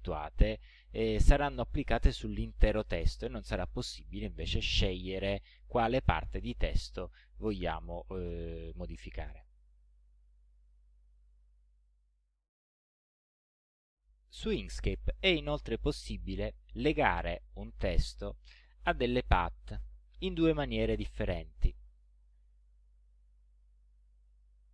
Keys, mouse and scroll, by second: 10.7 click, 21.8 click, 24.2 click.